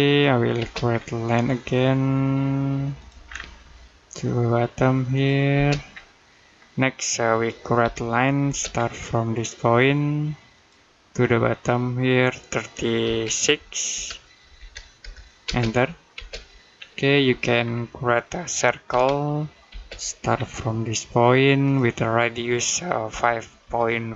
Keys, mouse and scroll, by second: 0.4 space, 0.7-1.5 scroll up 1, 2.8 click, 3.1 scroll down 1, 3.4 middle click, 4.9 click, 5.4 space, 5.7-6.1 scroll up 1, 6.1 middle click, 7.6 l, 8.3 space, 8.6-9.6 scroll up 1, 10.4 click, 12.8 2, 13.7 BackSpace, 14.4 3, 15.3 space, 16.6-17.1 scroll up 1, 17.1 middle click, 17.4-17.8 scroll down 1, 17.8 middle click, 18.7 c, 19.5 space, 20.2-21.5 scroll up 1, 21.5 click, 22.9-24.1 typing.